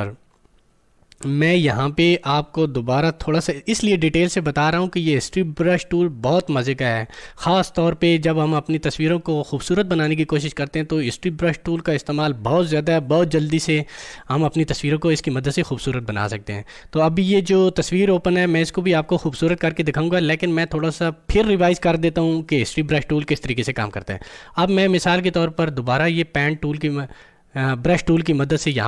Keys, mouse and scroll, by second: 26.3 click.